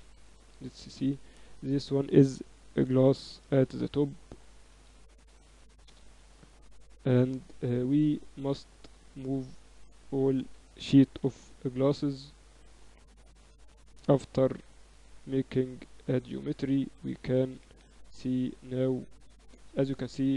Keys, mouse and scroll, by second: 0.5 z, 0.9 z, 1.6-3.5 drag, 3.1 s, 6.1 z, 6.5 z, 7.6 KP_7, 8.9 z, 9.5-11.4 right drag, 9.7 z, 10.5 a, 11.1 b, 13.8 ctrl+alt+shift+c, 15.4-17.1 drag, 16.9-18.5 typing.